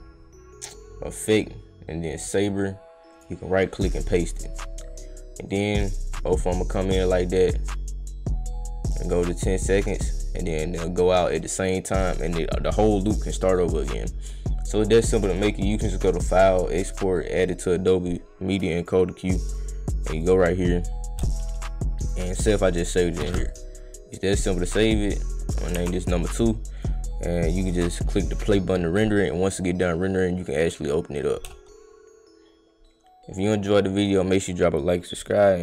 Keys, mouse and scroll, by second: 3.1 right click, 3.8 click, 5.5-5.9 drag, 10.1-13.5 right drag, 14.9 click, 16.9 click, 18.8 click, 19.4 click, 20.1 click, 22.0 click, 23.5 click, 24.3 click, 24.7 click, 25.7 2, 26.7 click, 28.3 click, 33.4 click.